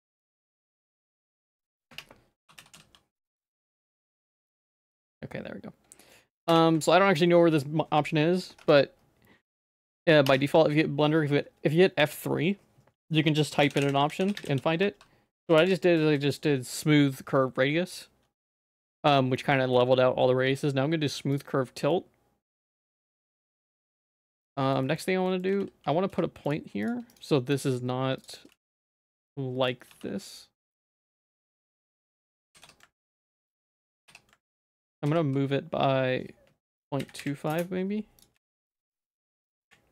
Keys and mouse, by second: 2.0 F3, 5.0-6.1 middle drag, 6.6 F3, 9.7 middle click, 10.3 F3, 13.9 m, 16.1 BackSpace, 22.0 middle click, 22.7 Tab, 23.3 ctrl+s, 23.8 middle click, 24.0 Tab, 24.6 middle click, 24.8 shift+middle click, 25.3 middle click, 25.5 g, 27.1 right click, 28.5 g, 28.6 x, 29.3 click, 29.9 g, 32.5 g, 33.7 click, 33.9 g, 34.9 g, 38.4 g.